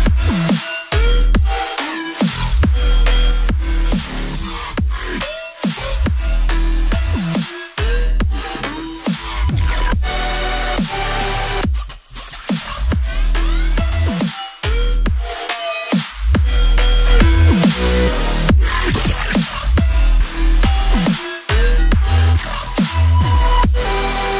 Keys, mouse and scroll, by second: 2.8 scroll down 1, 6.2 right click, 13.4 ctrl+scroll down 1.